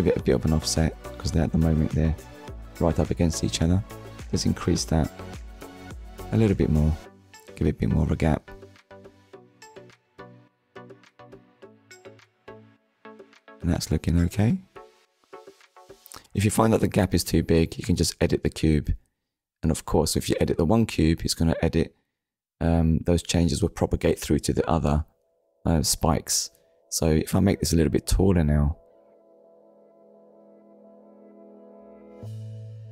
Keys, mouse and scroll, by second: 2.0 click, 2.3 shift+click, 9.1 middle click, 14.3-14.7 scroll up 1, 15.6 shift+middle click, 16.5 middle click, 18.0 KP_1, 18.8 Tab, 20.6 click, 22.4 click, 24.9 scroll down 1, 25.6 shift+middle click.